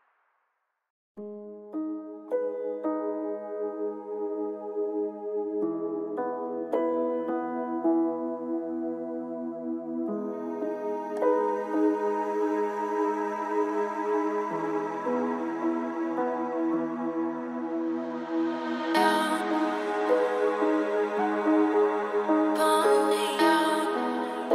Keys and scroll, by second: 10.2 ctrl+space, 12.3 ctrl+a, 13.4 ctrl+v, 15.3 ctrl+space.